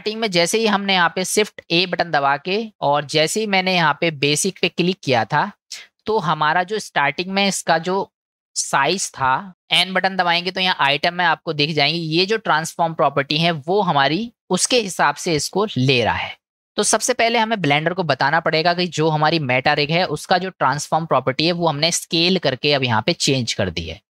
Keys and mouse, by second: 1.9 shift+a, 8.2 shift+middle click, 9.5 n, 19.2 shift+middle click, 20.0-20.7 middle drag.